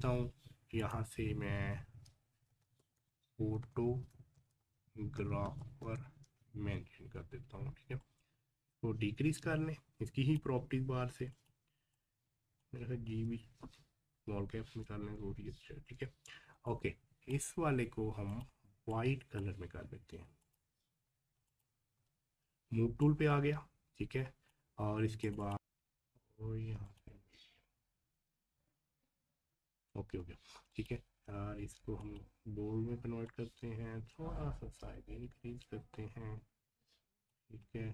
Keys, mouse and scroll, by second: 2.5-2.8 typing, 3.9-6.3 typing, 6.5 ctrl+a, 8.0-13.1 drag, 13.1 g, 16.7-20.4 drag, 21.9 v, 23.0-25.2 drag, 25.5 typing, 26.9 click, 30.7-37.9 drag.